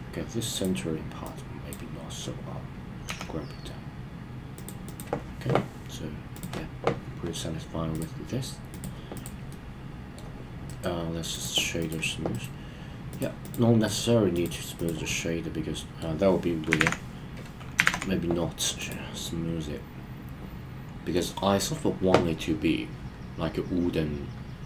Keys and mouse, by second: 0.5 click, 1.4 click, 3.2 g, 4.5 click, 4.9 click, 8.0 click, 9.5-10.1 middle drag, 10.7-11.4 right drag, 12.9-15.2 right drag, 15.2-16.0 middle drag, 16.8 super+z, 17.8 super+z, 18.8 click, 19.2-21.3 middle drag.